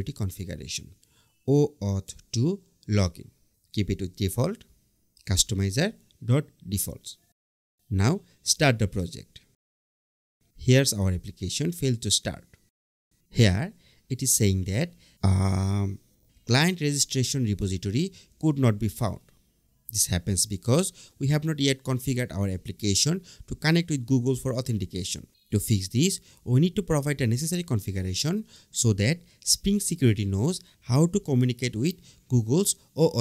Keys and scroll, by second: 1.4 Return, 6.0 Return, 6.5 Right.